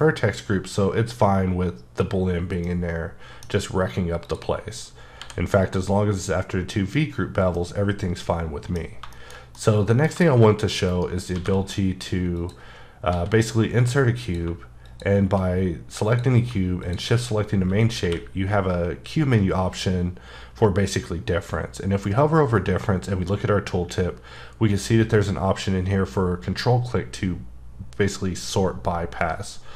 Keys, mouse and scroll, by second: 2.6 middle click, 4.2 click, 5.2 h, 5.6 click, 7.5 middle click, 8.8-9.1 scroll down 2, 9.1 shift+middle click, 10.9 shift+right click, 11.3 shift+a, 12.3 click, 13.1 s, 14.2 click, 18.0 q.